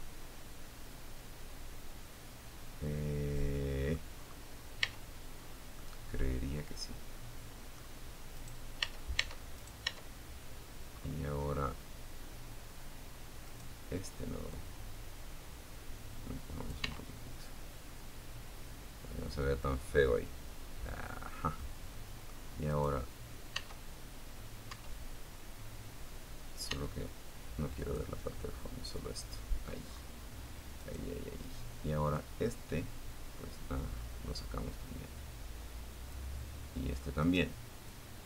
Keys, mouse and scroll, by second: 2.3-2.9 scroll up 1, 3.0 Tab, 3.7 scroll down 1, 3.9-6.1 middle drag, 6.5 right click, 7.0 Tab, 7.7 right click, 8.1 Tab, 9.1-9.7 scroll up 1, 11.6 right click, 12.7-15.0 drag, 15.0 Tab, 15.0 middle click, 15.5-15.9 scroll down 1, 16.1-19.9 middle drag, 20.1 middle click, 20.9 right click, 21.7 Tab, 22.9 Tab, 24.9 Tab, 25.9 click, 27.3 middle click, 28.1-28.6 scroll up 2, 28.9 right click, 30.3-32.1 drag, 32.1-32.4 scroll up 1, 35.4 right click, 36.0-38.2 drag.